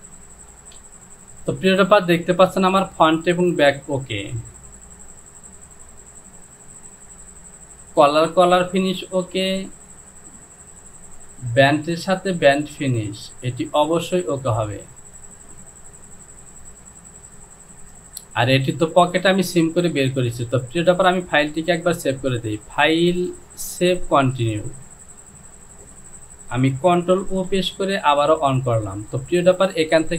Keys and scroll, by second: 0.7 Home, 6.7 Return, 16.6 j, 27.3 ctrl+o.